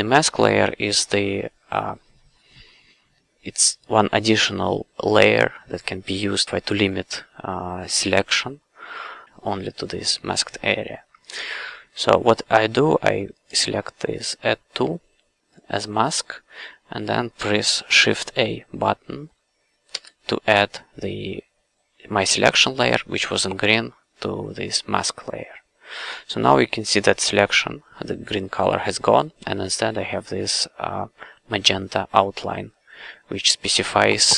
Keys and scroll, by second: 19.9 shift+a.